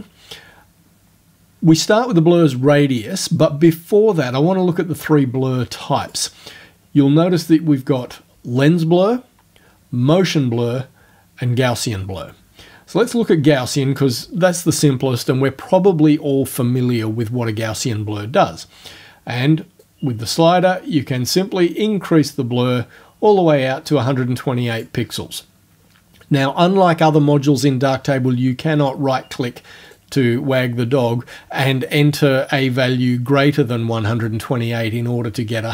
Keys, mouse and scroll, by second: 6.1 click, 13.1 click, 19.9-25.0 drag, 29.9 right click.